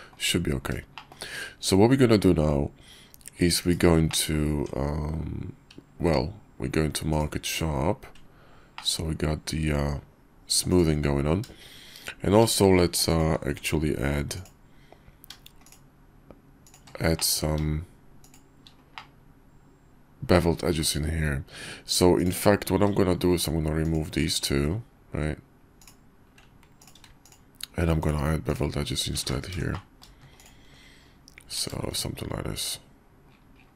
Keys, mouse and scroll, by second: 0.9 shift+drag, 3.6 /, 4.1-4.4 drag, 4.5 Tab, 6.0 q, 8.8 click, 10.6 click, 13.1 ctrl+alt+click, 14.4 click, 17.1 middle click, 18.2 shift+middle click, 18.9-20.3 middle drag, 20.3 click, 20.8-22.0 middle drag, 24.3 x, 26.8 alt+click, 28.5 alt+shift+click, 29.3 ctrl+z, 29.7 middle click, 31.5 ctrl+b.